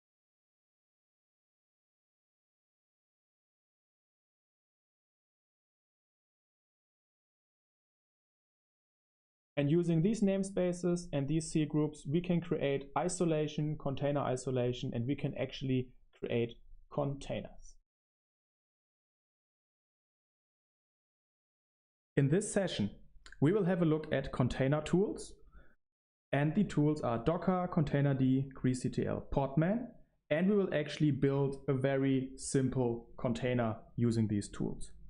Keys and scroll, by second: 0.0-7.9 typing, 0.9 Escape, 8.7 super+1, 9.1 space, 25.7 super+3, 26.9 super+7, 29.1 super+1, 29.4 super+1.